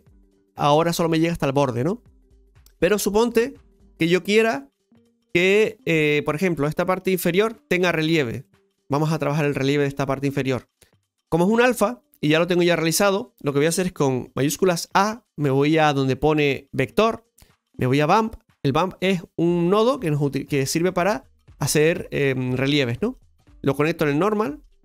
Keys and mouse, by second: 2.2-2.6 middle drag, 3.6-7.1 middle drag, 8.5-9.7 middle drag, 12.1 click, 15.9 shift+a, 20.8-22.0 middle drag, 22.0 click, 23.1-24.5 drag.